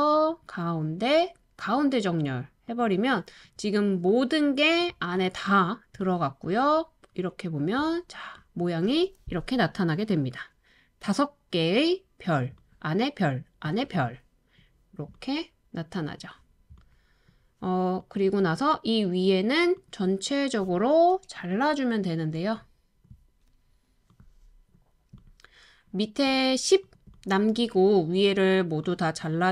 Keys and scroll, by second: 7.4-8.1 typing, 12.7-13.9 typing, 15.2-16.8 typing.